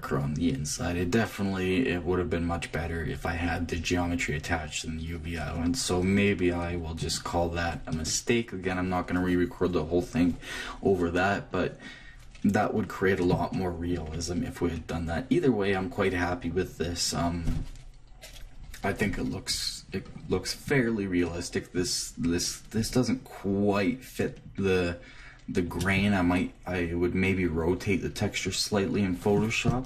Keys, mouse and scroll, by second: 7.2-10.3 middle drag, 11.7-13.2 middle drag, 13.2-16.4 drag, 19.9-26.1 middle drag.